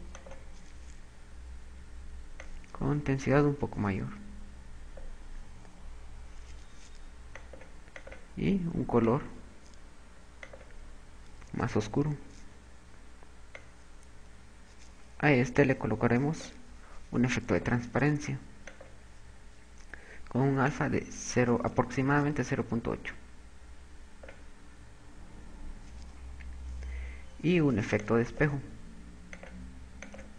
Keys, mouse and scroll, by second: 2.8 click, 7.3 click, 8.4 click, 12.5 click, 18.1 click, 19.3 click, 21.3 click, 27.9 click, 29.9 click.